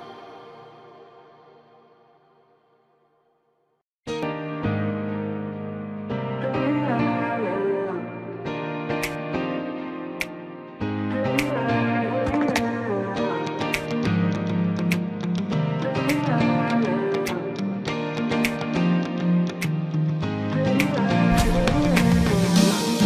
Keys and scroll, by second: 6.7 shift+space, 12.3 ctrl+z, 12.9 ctrl+z, 17.9 space, 21.2 ctrl+KP_Add, 22.0 space.